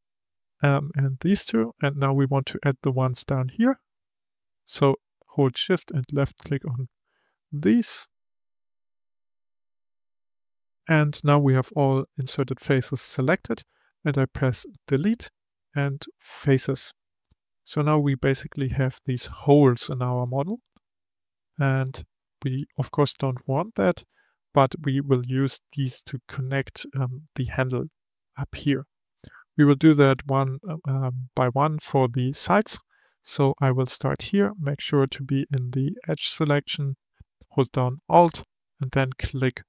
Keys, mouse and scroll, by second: 1.4-3.4 scroll up 2, 3.4 shift+click, 4.0 shift+click, 4.9 scroll down 5, 5.5 middle click, 6.4 scroll up 5, 6.9 middle click, 7.8 shift+click, 8.2 shift+click, 8.8-10.3 middle drag, 10.3-11.0 scroll down 4, 11.0 scroll down 1, 11.0-14.2 middle drag, 14.7 Delete, 17.4 middle click, 17.9-18.8 scroll up 5, 18.8-20.8 middle drag, 20.8-21.2 scroll down 3, 21.2-24.4 middle drag, 28.9-29.6 scroll up 1, 29.6-30.7 shift+middle drag, 30.7-32.6 scroll up 1, 32.6-33.7 scroll up 1, 34.9-36.9 drag, 36.9-38.0 scroll up 1, 38.0-39.5 scroll up 1, 39.5 alt+click.